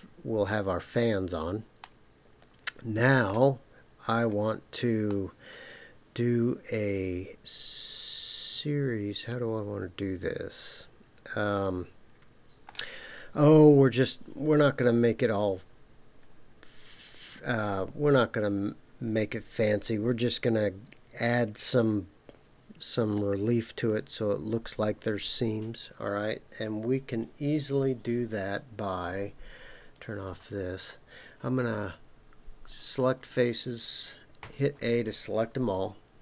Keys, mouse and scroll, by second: 1.8-3.4 middle drag, 3.8-4.4 scroll up 3, 5.1-12.8 middle drag, 29.9 click, 32.7 click, 34.4 a.